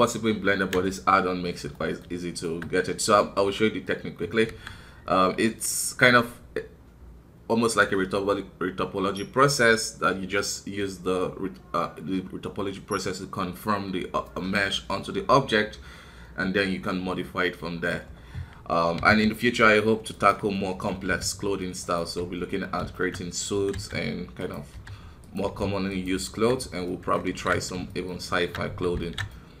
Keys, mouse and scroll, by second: 4.5 KP_1, 20.5 middle click, 21.1 g, 22.0 KP_1, 22.9 shift+middle click, 23.2 scroll up 1, 23.5 s, 26.8 middle click, 27.2 alt+KP_1, 27.9 shift+middle click, 28.3 shift+Tab, 29.0 alt+a, 29.3-29.6 middle drag.